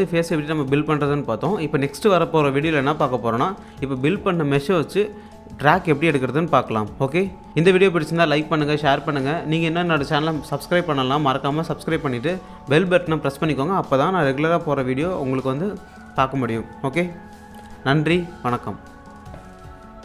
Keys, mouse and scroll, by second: 1.2-2.0 scroll down 1.